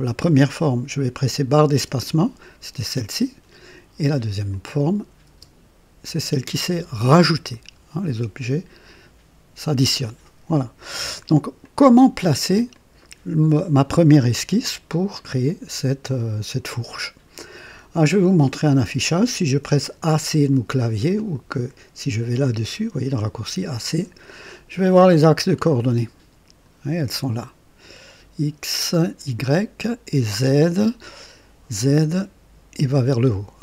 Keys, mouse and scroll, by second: 1.8 typing, 4.5 click, 5.3 typing, 10.8 click, 11.6-13.4 drag, 12.7 right click, 21.1 click, 23.9 click, 24.9-26.9 drag, 29.6-31.3 drag, 31.9 typing.